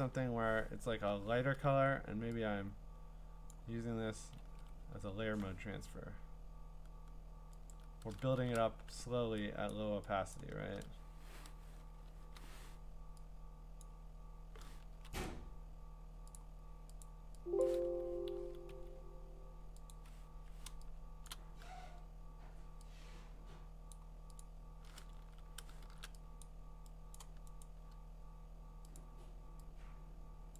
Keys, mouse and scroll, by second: 0.9 Return, 3.5 click, 4.4 ctrl+z, 4.4-4.7 ctrl+scroll, 7.7 alt+click, 9.7 click, 10.3 click, 11.1 alt+click, 12.2 ), 13.8 click, 14.9 ctrl+z, 15.3 right click, 16.4 click, 17.0 click, 17.6 click, 17.8 Escape, 18.4 Escape, 18.7 Escape, 19.9 click, 21.2 click, 21.3 click, 23.9 click, 24.4 click, 25.2 ctrl+z, 25.8 shift+1, 26.4 click, 27.2 click, 27.6 right click, 29.0 click.